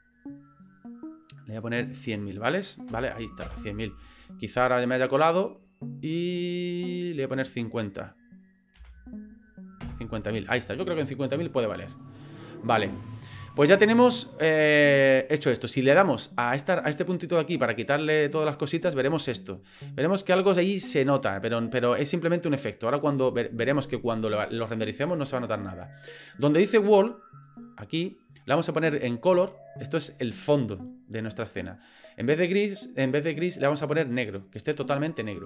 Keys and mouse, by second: 1.6-4.0 drag, 5.4-10.8 drag, 11.5 shift+middle click, 12.0 middle click, 12.8-17.7 drag, 18.8 shift+middle drag, 20.4 shift+middle drag, 21.7 middle click, 27.4 click, 32.4 click.